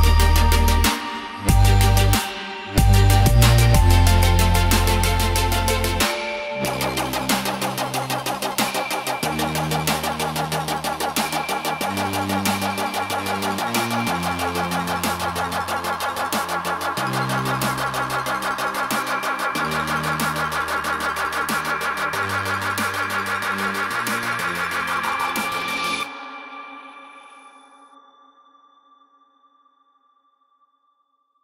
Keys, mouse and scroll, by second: 10.4 click, 13.2 shift+click, 13.3 shift+click, 13.6 shift+click, 14.0 shift+click, 14.3 shift+click, 14.5 shift+click, 14.8 shift+click, 14.9 shift+click, 15.4 shift+click, 15.6 shift+click, 15.8 click, 16.0 click, 16.3 click, 16.6 click, 17.1 ctrl+g, 17.3 click, 18.5 click, 18.8 alt+click, 19.2-19.8 alt+scroll down 2, 19.8 click, 20.3-21.2 alt+scroll up 4, 21.2 scroll down 1, 21.7 click, 25.5-25.8 scroll down 2, 26.0 scroll up 1, 26.6 click, 29.1 scroll down 1, 29.6 right click, 30.1 click, 30.3-30.7 scroll down 2, 31.0 click.